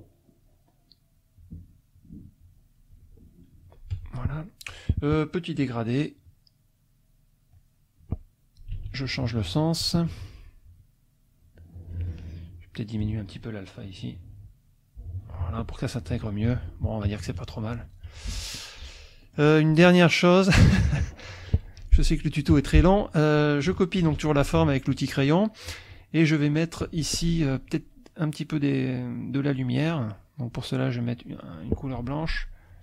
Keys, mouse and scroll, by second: 1.9-2.9 drag, 3.9 F1, 5.7 click, 8.7 g, 9.7 click, 10.3 F2, 10.7-12.0 drag, 12.7 click, 13.9-15.4 drag, 15.4 F1, 16.5 F1, 17.1 KP_Subtract, 18.0 F1, 18.8 click, 19.2-20.7 middle drag, 19.2-20.7 scroll up 3, 21.8 F2, 22.2 click, 22.5 F1, 24.0 ctrl+c, 24.9 click, 29.1 click, 30.9 click, 32.0 F2.